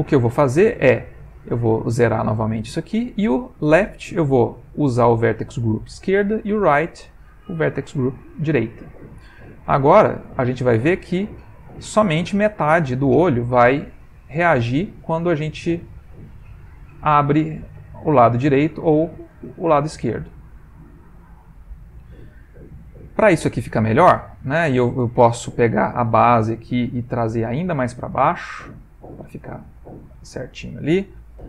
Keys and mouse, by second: 1.3 click, 3.1 click, 5.0 click, 6.7 click, 7.4 click, 9.7 click, 14.0 click, 17.6 click, 18.4 click, 19.8 click, 22.6 middle click, 25.1 click, 26.0 middle click, 26.6 Tab, 28.1 g, 29.4 middle click, 30.1 Tab.